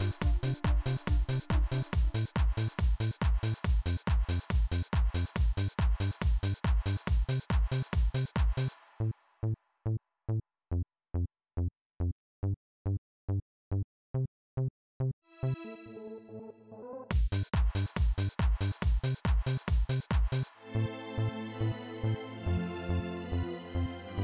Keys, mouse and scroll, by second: 0.3 click, 1.0 click, 2.4-3.6 drag, 7.0 click, 8.2 click, 11.0 click, 12.7 click, 13.7 click, 14.8 click, 16.9 click, 18.8 click, 19.7 click, 22.4 click, 23.8 click.